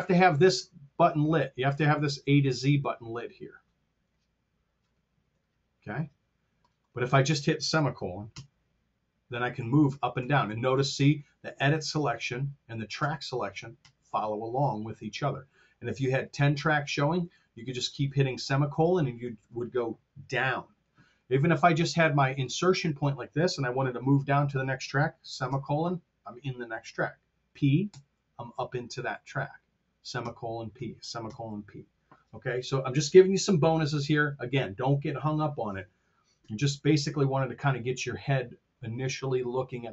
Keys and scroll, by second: 8.2 ;, 9.3-11.1 typing, 12.8-17.9 typing, 25.3 ;, 27.8 p, 29.3-31.6 typing.